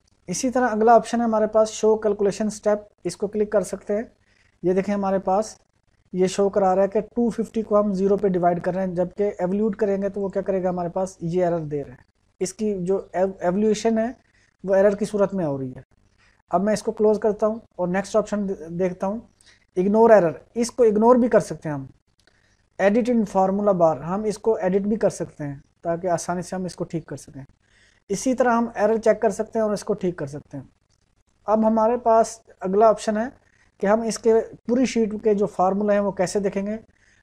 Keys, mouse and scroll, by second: 3.0 click, 10.2 click, 17.1 click, 31.2 click.